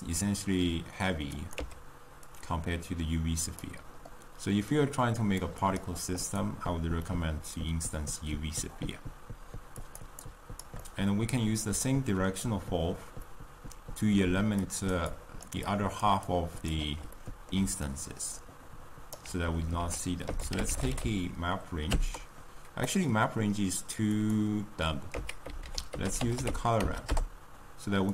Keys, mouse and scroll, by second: 1.7 x, 3.7 click, 6.5 click, 7.3-14.2 middle drag, 14.2 d, 14.8 click, 14.9 d, 15.3-17.1 drag, 17.1 middle click, 17.5 d, 17.9-25.2 right drag, 25.2 x.